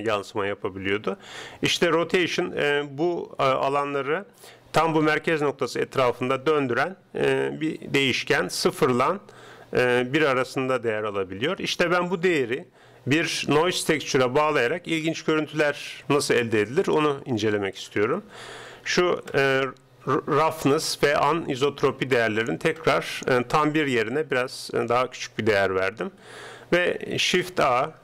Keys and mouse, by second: 16.2-17.8 middle drag, 17.8-19.6 drag, 21.2-23.0 drag, 27.6 shift+a.